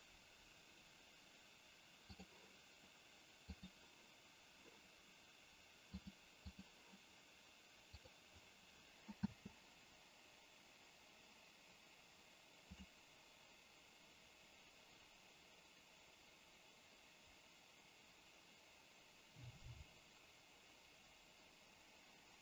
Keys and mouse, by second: 2.4 click, 3.4-4.0 drag, 6.1 click, 8.0 click, 9.1 space.